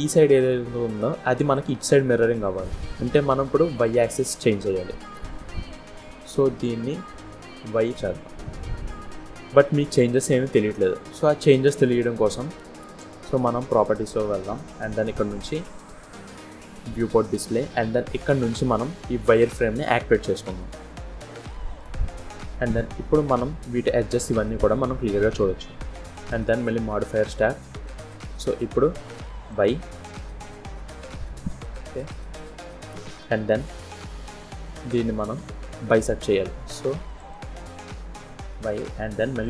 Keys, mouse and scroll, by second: 1.4 click, 2.4 middle click, 4.5 middle click, 6.4 click, 7.6 click, 9.7 middle click, 11.8 click, 13.5 click, 16.5 click, 19.3 click, 20.6-20.9 scroll up 1, 21.1 shift+middle click, 21.9 middle click, 23.2-23.6 scroll up 2, 23.7 middle click, 26.3 click, 27.8 scroll down 1, 27.9 middle click, 28.4 scroll up 1, 29.4 click, 30.1 scroll down 1, 30.4 middle click, 32.4 scroll up 2, 32.7 shift+middle click, 33.4 scroll down 1, 33.5 middle click, 34.3-35.0 scroll up 1, 37.0 click, 39.3 click.